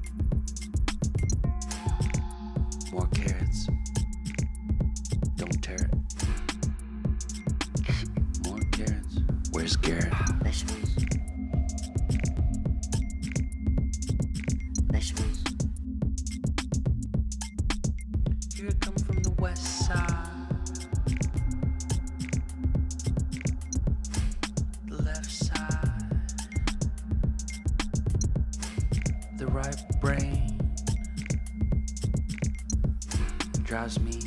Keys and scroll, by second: 0.0-2.7 typing, 2.7 Return, 7.3 0, 7.4 0, 9.3 0, 13.7 Up, 16.0-16.9 typing, 20.2 ctrl+t, 25.9 Return, 32.6-34.2 typing.